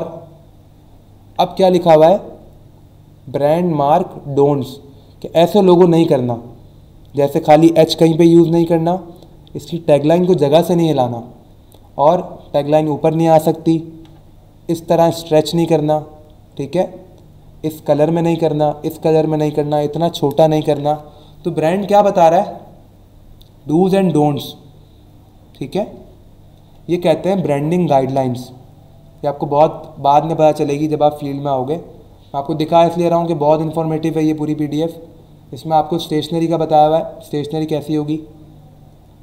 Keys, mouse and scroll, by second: 26.1 scroll down 1, 28.4 scroll down 1, 29.0 scroll down 1, 38.5 scroll down 1, 39.1 scroll down 1.